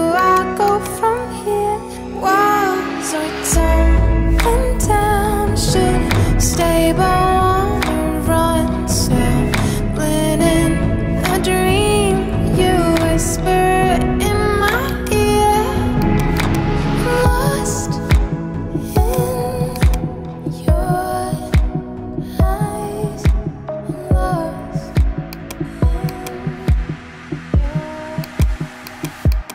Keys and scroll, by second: 7.9 ], 8.2 [, 11.7 ], 12.1 [, 12.7 ], 23.3 [, 26.6 [.